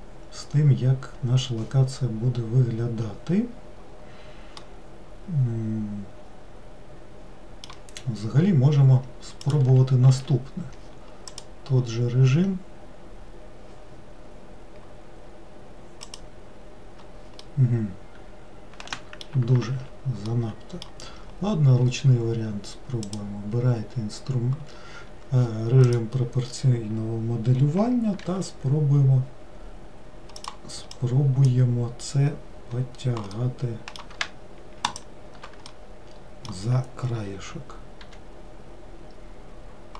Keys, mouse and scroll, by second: 2.4-4.7 scroll down 1, 4.8-7.8 middle drag, 9.7 click, 10.2 a, 17.6-19.8 middle drag, 19.8 ctrl+z, 20.4-23.2 middle drag, 23.2 click, 26.1 click, 28.4 g, 31.6 click, 33.5-35.2 middle drag, 35.2 shift+click, 35.9-38.2 middle drag, 38.2 g.